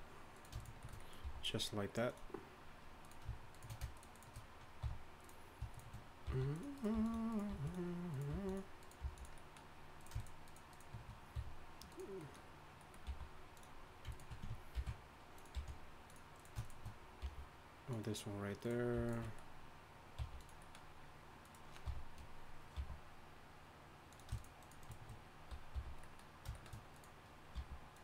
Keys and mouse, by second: 1.2 e, 4.8 f, 6.2-9.0 typing, 8.3-9.7 drag, 10.0-11.3 drag, 11.3 f, 11.9 click, 12.4 click, 13.1 g, 14.7 ctrl+b, 15.5 g, 16.2 click, 17.2 g, 18.2-21.8 drag, 20.2 g, 21.8 f, 22.7 g, 25.7 f, 26.1 click, 26.9 click, 27.5 g.